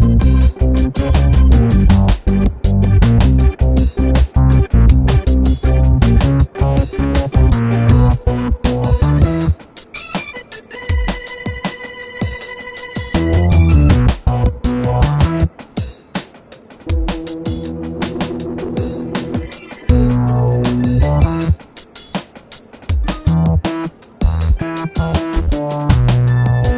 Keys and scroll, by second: 20.7 alt+shift+super+e, 25.4 super+-.